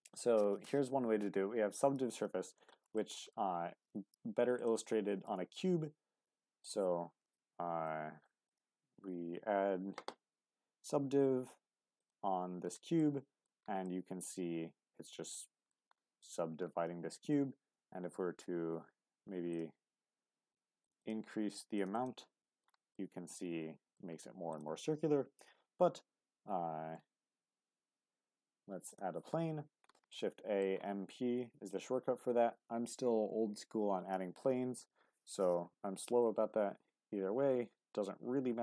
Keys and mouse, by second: 3.0 shift+middle drag, 5.2 shift+a, 8.5-13.0 drag, 13.0-13.4 middle drag, 13.8-15.7 middle drag, 16.8 Tab, 19.5-20.1 drag, 20.8-22.1 drag, 22.9-24.0 middle drag, 25.4 shift+a, 30.1-30.6 middle drag, 35.3-38.6 drag.